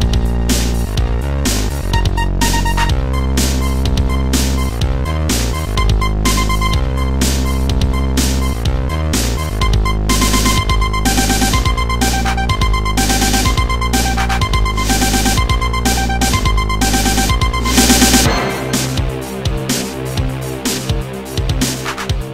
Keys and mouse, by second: 0.6 click, 2.4 click, 7.6 click, 8.2 click, 9.5 click, 11.3 click, 12.6 click, 12.7 click, 13.3 click, 14.9 click, 15.9 click, 17.4 click, 18.8 click, 20.2 click, 21.4 click, 22.1 click.